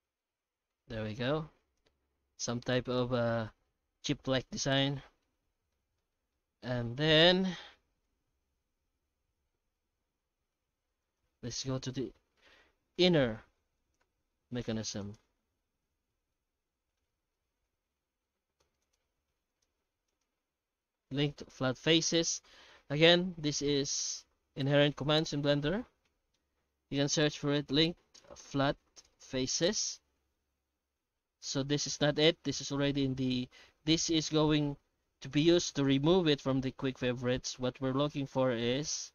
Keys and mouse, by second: 0.2-0.7 middle drag, 1.0 shift+middle drag, 1.3 middle click, 3.0-3.3 middle drag, 4.8-5.2 middle drag, 5.9 shift+middle drag, 6.3 middle click, 7.0 shift+middle drag, 7.4-8.0 middle drag, 8.4 shift+middle drag, 8.9-10.5 middle drag, 11.0 right click, 11.4-12.1 middle drag, 12.9 h, 13.8 right click, 14.0 h, 14.4-14.8 middle drag, 15.0 right click, 15.2 Tab, 15.6 alt+shift+z, 16.1 shift+middle click, 16.5 alt+a, 16.7 middle click, 17.7 ctrl+r, 19.1 3, 19.5 right click, 20.1 shift+right click, 20.4 q, 23.6 q, 26.1 F3.